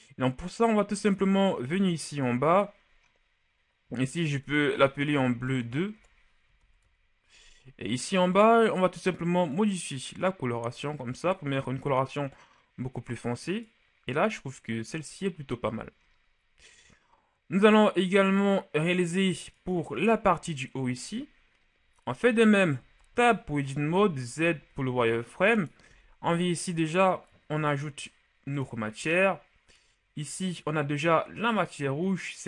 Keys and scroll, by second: 5.1 BackSpace, 5.3 BackSpace, 5.7 BackSpace, 6.0 BackSpace, 22.8 Tab, 23.7 z, 24.5 z, 25.9 b.